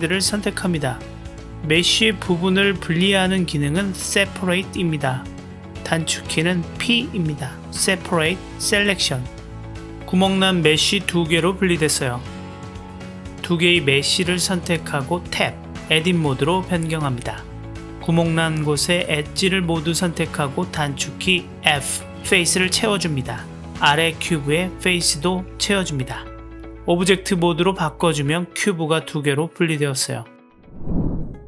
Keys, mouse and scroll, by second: 0.5-4.0 drag, 4.9 p, 9.5 Tab, 9.8-10.3 drag, 11.0 g, 12.1-12.7 drag, 12.7 middle click, 14.5 click, 15.3 Tab, 17.9-18.7 drag, 21.7 f, 23.8 middle click, 24.6-25.3 drag, 25.6 f, 26.5 Tab, 26.9 click, 27.2-28.2 middle drag, 29.2 click.